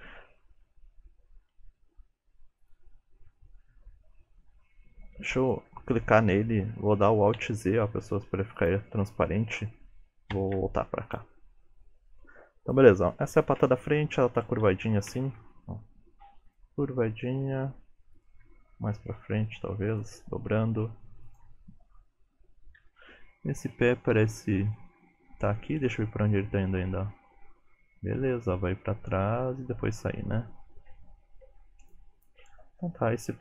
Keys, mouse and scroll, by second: 0.4 shift+middle click, 0.9 scroll up 3, 2.0 alt+z, 2.7 click, 3.4 Tab, 4.4 Tab, 5.2 ctrl+Tab, 5.5 click, 7.4 alt+z, 8.6 click, 10.4 ctrl+Tab, 11.1 click, 12.7 click, 14.7 shift+middle click, 15.5 r, 16.8 g, 18.5 g, 21.3 click, 22.8 KP_3, 26.4 click.